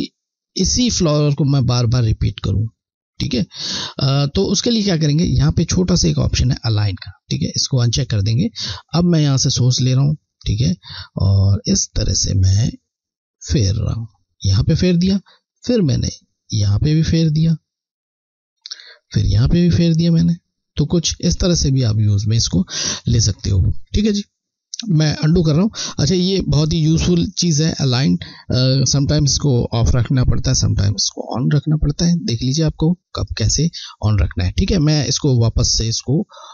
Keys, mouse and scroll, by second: 3.9 scroll, 6.6-6.9 scroll down 1, 7.4 click, 9.4 alt+click, 11.0 click, 15.6 click, 16.0 click, 34.7 click, 36.3 scroll.